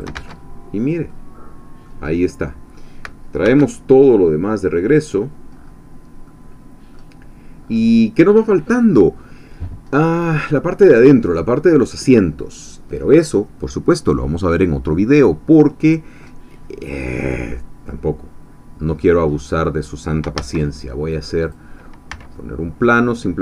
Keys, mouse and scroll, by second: 0.2 shift+Tab, 0.6-1.0 shift+scroll down 3, 1.1 click, 2.1-2.4 scroll down 1, 2.4 click, 3.4 alt+h, 4.1 scroll down 1, 4.7 click, 5.6 scroll up 1, 6.0-6.3 scroll down 1, 6.3 click, 7.7-9.8 scroll up 1, 9.8-10.1 scroll up 1, 10.1-11.3 scroll down 1, 11.3 scroll up 1, 16.5 scroll down 2, 16.8-19.2 middle drag, 19.4 middle click, 20.4 shift+a, 21.4 click, 22.1 s.